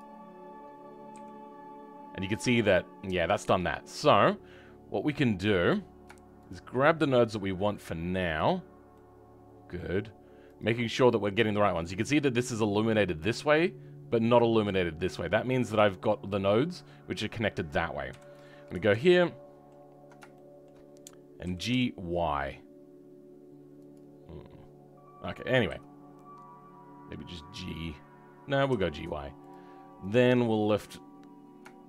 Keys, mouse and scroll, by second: 1.0 g, 6.4 shift+click, 7.2-8.3 shift+middle drag, 8.3 shift+click, 8.9-10.5 shift+middle drag, 10.5 shift+click, 11.0-15.2 shift+middle drag, 15.2-15.6 scroll down 3, 15.6 middle click, 18.0 KP_3, 18.4-19.1 scroll up 2, 19.1-20.7 ctrl+middle drag, 20.7-21.4 scroll up 2.